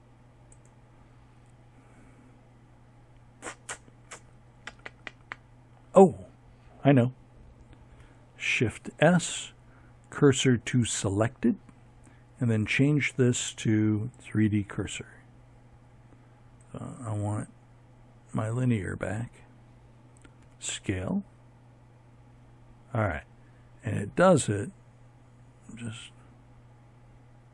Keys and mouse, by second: 6.4 shift+s, 10.4-13.1 drag, 14.2 click, 16.1 click, 18.4 s.